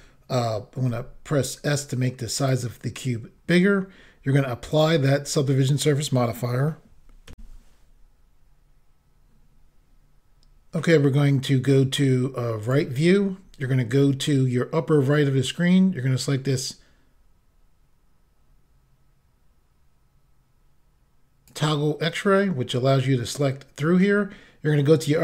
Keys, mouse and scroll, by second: 0.9 s, 2.4 click, 4.8 click, 7.4 Insert, 12.7 click, 21.6 click, 23.6-24.8 scroll up 1.